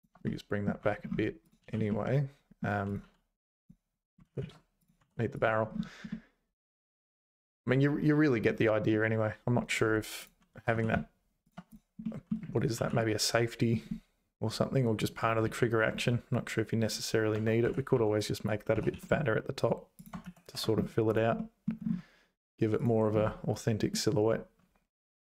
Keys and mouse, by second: 0.4 middle click, 0.8 `, 1.4 click, 1.6 h, 1.9 middle click, 3.4 h, 4.2 ctrl+z, 4.4 ctrl+z, 4.8 click, 5.0 h, 5.4 click, 6.1-8.4 middle drag, 8.9 middle click, 10.2 click, 10.5 g, 12.0 middle click, 12.8 alt+h, 13.0 middle click, 13.5 middle click, 15.4 ctrl+z, 17.3 Tab, 17.6 z, 17.9 1, 18.3 click, 18.7 s, 20.2 z, 20.5 Tab, 21.1 click, 21.3 middle click, 22.8 click, 24.0-25.2 middle drag.